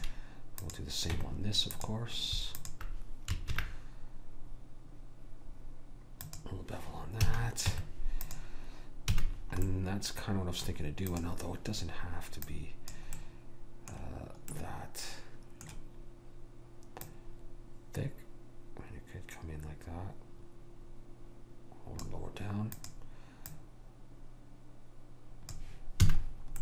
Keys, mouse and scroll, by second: 0.7 click, 1.3 Tab, 3.6 ctrl+b, 7.3 a, 7.8 Tab, 9.3 a, 11.2-14.4 drag, 11.2-12.4 right drag, 13.3-14.3 right drag, 14.8-17.1 middle drag, 17.1 click, 22.8-25.4 drag, 26.2 a, 26.4 middle click.